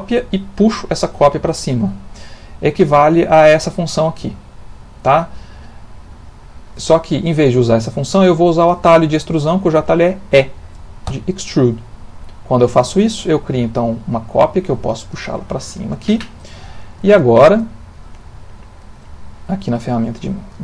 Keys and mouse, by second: 3.8 click, 6.4 click, 7.0 shift+middle click, 7.9 middle click, 9.1 middle click, 9.4 shift+middle click, 11.1 e, 16.7 shift+middle click, 17.3 ctrl+middle click, 18.7 click, 20.2 ctrl+middle click.